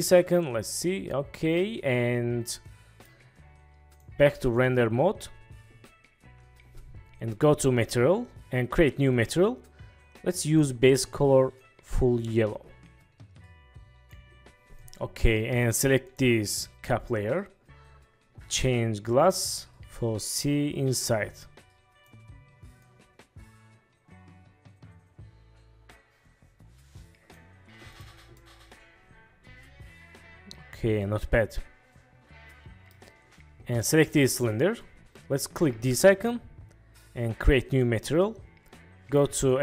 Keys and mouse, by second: 0.4-3.2 middle drag, 4.7 middle click, 9.2 click, 10.5 click, 14.4 ctrl+s, 16.1 click, 19.6-22.3 drag, 23.0-27.5 drag, 27.5 middle click, 28.5-33.0 middle drag, 35.9 click, 39.5-39.6 drag.